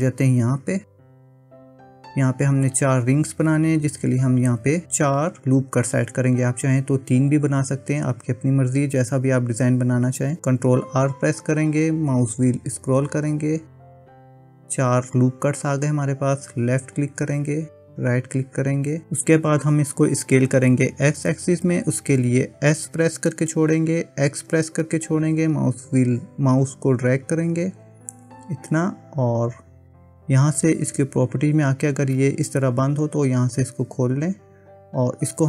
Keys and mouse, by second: 10.9 ctrl+r, 22.8 s, 31.8 click, 33.6 click, 34.7-35.4 drag.